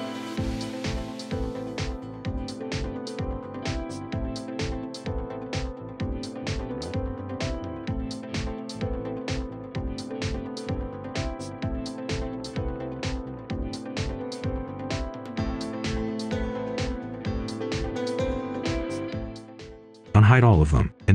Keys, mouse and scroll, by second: 0.0 right click, 0.5 ctrl+shift+click, 1.0-1.8 typing, 1.7 right click, 1.9-2.2 scroll up 1, 2.2 click, 2.3 scroll down 1, 2.6 shift+click, 3.4 shift+click, 4.4 right click, 4.8 scroll up 1, 5.2 Tab, 5.4 scroll up 1, 5.6 ctrl+shift+click, 6.1 ctrl+shift+click, 6.7 right click, 6.8-7.2 scroll up 1, 7.3 Return, 7.6-8.1 scroll up 1, 8.1 click, 8.3 shift+click, 8.7-9.6 typing, 9.5 click, 10.0 scroll down 1, 10.1 right click, 10.3 Tab, 11.7 click, 12.6 right click, 13.2 scroll up 1, 13.4 right click, 14.1-14.4 scroll down 1, 14.4-17.3 right drag, 18.4 click, 18.7 scroll down 1, 18.9-19.7 scroll up 1, 19.4-20.6 typing, 20.8 Return.